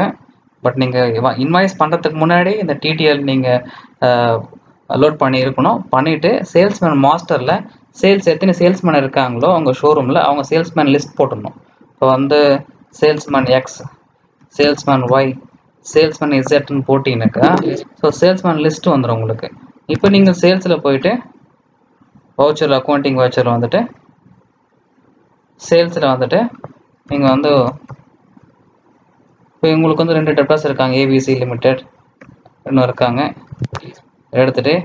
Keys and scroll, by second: 33.4 ctrl+a.